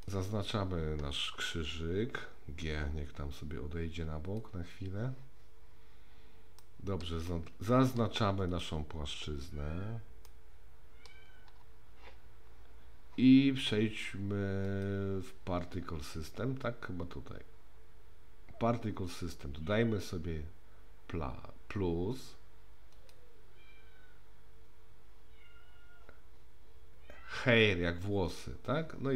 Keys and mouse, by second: 2.0 g, 6.6-7.0 middle drag, 7.3-8.0 middle drag, 10.3-11.1 middle drag, 14.6 click, 22.9 click, 28.3 click.